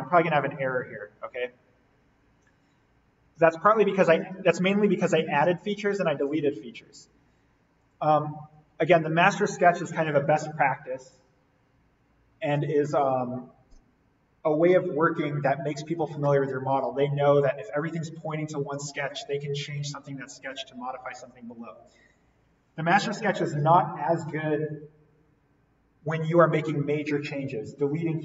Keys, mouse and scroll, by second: 3.2 click, 3.4 alt+v, 4.1 v, 6.9 click.